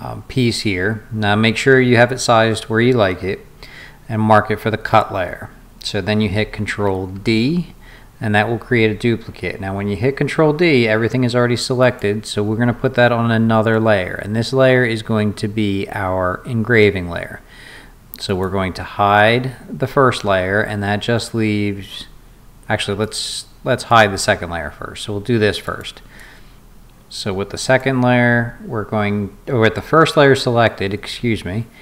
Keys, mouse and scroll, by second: 7.2 ctrl+d, 11.8 click, 18.3 click, 23.0 click, 23.9 click, 25.6 click, 26.2-27.8 drag.